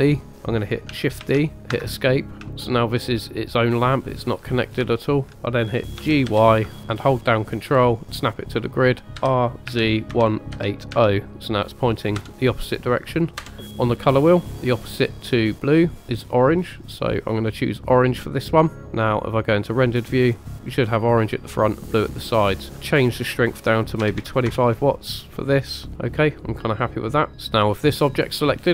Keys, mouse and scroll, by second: 1.2 shift+d, 1.7 Escape, 2.6-3.0 shift+middle drag, 5.0 shift+middle click, 5.3 scroll down 2, 6.0 g, 6.3 y, 9.1 ctrl+click, 9.1 scroll up 2, 9.7-10.9 typing, 12.4 Return, 13.4 KP_0, 14.1 click, 19.5 drag, 22.6-24.5 drag, 27.5 click.